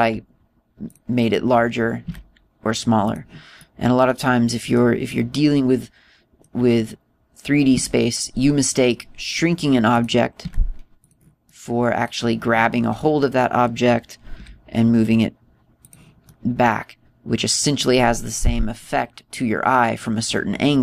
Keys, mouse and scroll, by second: 0.7 s, 1.9 click, 3.0 s, 4.1 click, 4.5 middle click, 6.0 middle click, 8.7 s, 10.9 click, 11.4 s, 12.0 click, 12.4 middle click, 13.6-14.3 scroll down 7, 15.3 g, 16.8 click, 17.2 middle click, 19.7 middle click.